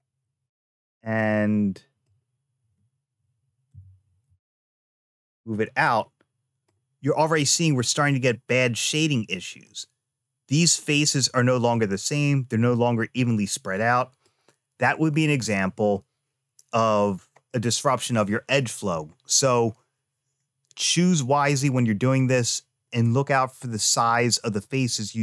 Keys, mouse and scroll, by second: 0.6-1.9 middle drag, 3.5 g, 5.7 middle click, 8.6 middle click, 11.1 middle click, 13.8 middle click, 17.3-18.8 middle drag, 21.5 middle click, 23.5-25.2 middle drag.